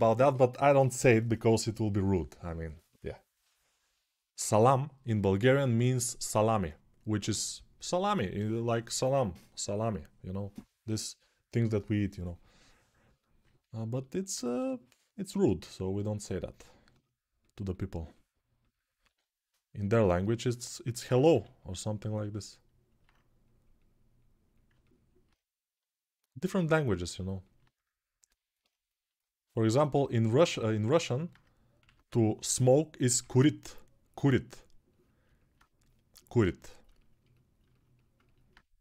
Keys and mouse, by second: 0.0-35.3 drag, 14.3 g, 18.8 6, 21.1 g, 31.6 1, 32.3 [, 32.8 [, 32.9 [, 37.6-38.8 alt+drag, 38.6 g.